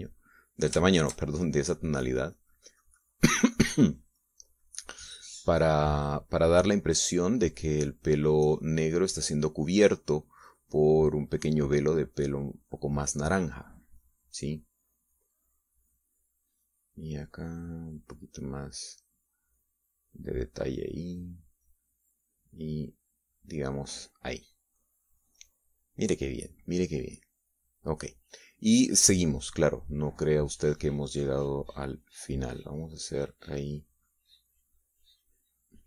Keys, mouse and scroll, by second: 0.0-1.8 middle drag, 1.9 middle click, 2.4 shift+middle click, 3.2-4.9 shift+drag, 5.1-15.7 shift+drag, 17.2-19.1 drag, 19.2-21.0 drag, 21.2-25.8 drag, 26.1 middle click, 26.8 middle click, 31.8 middle click, 32.7-34.7 drag, 34.7 middle click, 35.6-35.8 drag.